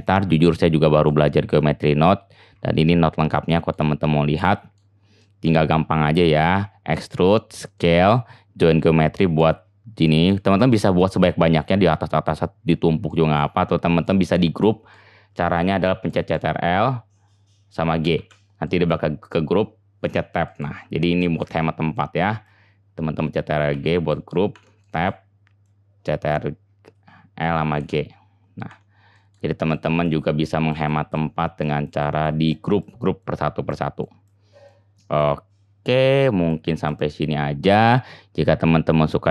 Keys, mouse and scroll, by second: 0.0 middle click, 0.0-15.5 drag, 15.5-18.1 middle drag, 18.2 ctrl+g, 18.3 middle click, 20.1 Tab, 23.7 ctrl+g, 24.5 Tab, 27.8 ctrl+g, 28.7 Tab, 37.1-39.3 drag.